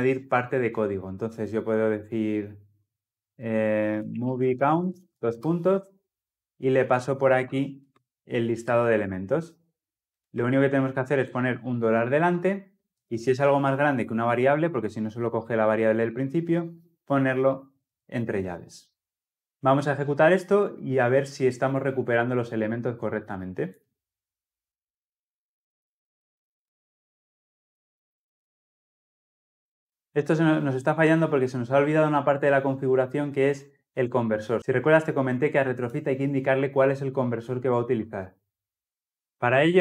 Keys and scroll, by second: 8.5 ctrl+x, 10.2 ctrl+x, 10.4 ctrl+v, 17.6 Delete, 19.2 ctrl+alt+o, 23.7 shift+F10.